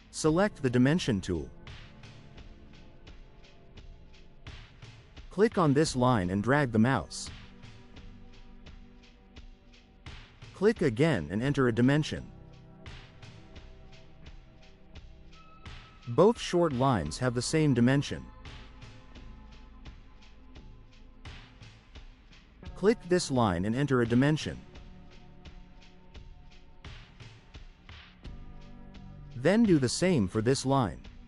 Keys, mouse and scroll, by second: 3.5 click, 6.1 click, 6.4 right click, 8.5 click, 10.3 click, 11.3 4, 13.6 click, 14.9 right click, 21.7 click, 23.6 click, 25.2 2, 26.0 0, 28.9 click, 30.6 click.